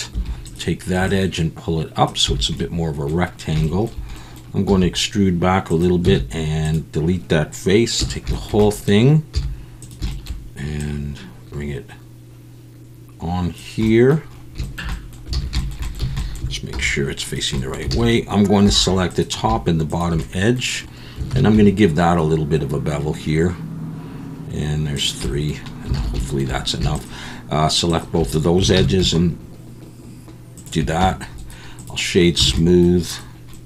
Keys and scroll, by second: 0.1 2, 2.3 a, 4.7 e, 6.0 x, 8.0 a, 9.3 z, 15.3 alt+a, 16.0 a, 16.7 alt+n, 17.9 alt+a, 18.6 2, 21.3 ctrl+b, 25.9 alt+a, 28.8 ctrl+b, 31.0 Tab, 32.4 alt+a.